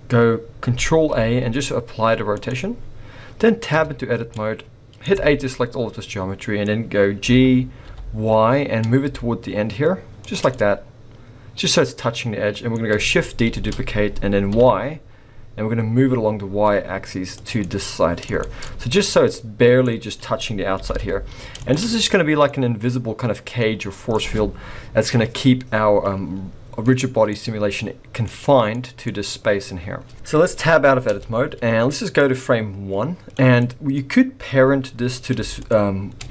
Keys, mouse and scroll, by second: 1.1 ctrl+a, 3.8 Tab, 4.3 middle click, 5.1 a, 5.5 middle click, 7.2 g, 10.5 middle click, 13.4 shift+d, 17.6 middle click, 17.6-18.1 scroll up 1, 18.4 shift+middle click, 18.7-19.1 scroll up 4, 19.1 middle click, 20.7 g, 21.9 scroll down 5, 22.1 middle click, 23.4 scroll down 1, 23.5-23.8 scroll down 1, 23.8 middle click, 27.3 middle click, 28.7 middle click, 29.9 scroll down 3, 30.1-31.0 scroll up 2, 31.1 Tab, 32.2 click, 33.6 middle click, 34.0 scroll up 1.